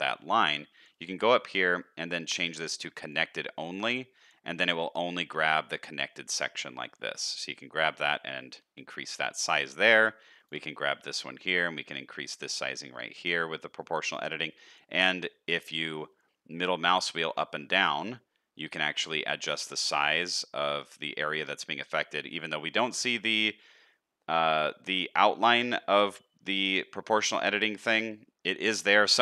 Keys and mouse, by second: 3.7 middle click, 6.7 middle click, 7.8 shift+click, 8.5 shift+click, 10.7 shift+click.